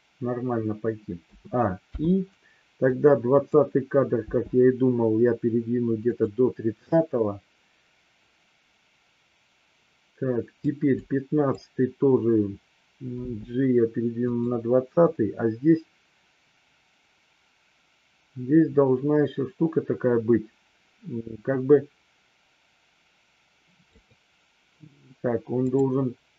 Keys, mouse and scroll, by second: 1.1 a, 1.8 i, 2.8-3.5 drag, 4.1 g, 6.0 click, 6.9-10.6 drag, 11.0-11.5 drag, 13.1 g, 15.0-23.9 drag, 25.6 click.